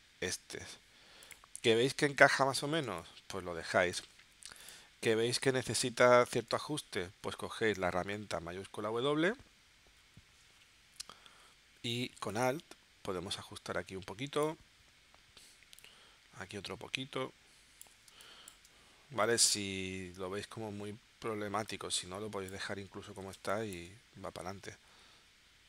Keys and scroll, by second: 2.9 space, 7.2 shift+w, 18.1 space, 23.4 space.